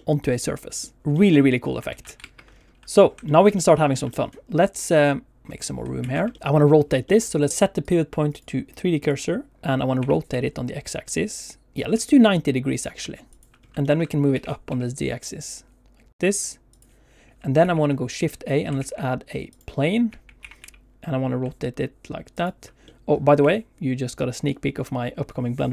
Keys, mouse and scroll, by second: 2.2 alt+shift+z, 2.2 ctrl+space, 2.2 middle click, 2.5-3.2 scroll down 4, 3.3 shift+middle click, 3.5 middle click, 3.9 shift+middle click, 4.1 middle click, 4.9 click, 6.0 ctrl+s, 6.3 shift+middle click, 6.3 middle click, 7.1 middle click, 7.5 click, 7.8 click, 8.3 click, 10.0 r, 10.3 x, 13.3 ctrl+click, 13.6 scroll down 1, 13.8 shift+middle click, 14.3 g, 14.7 z, 16.6 click, 17.5 shift+a, 18.7 shift+a, 20.0 q, 20.3 r, 20.5 x, 22.3 ctrl+click, 22.8 middle click, 23.3 q.